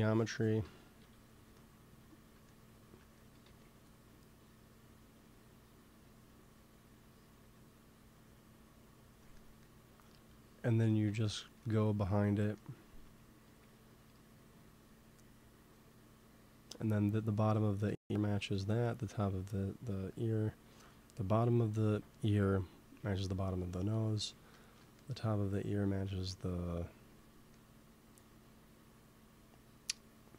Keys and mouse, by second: 0.9 KP_3, 3.1 g, 3.3 f, 4.0 click, 9.2-10.6 middle drag, 13.4 f, 14.1-17.7 drag, 24.3 middle click.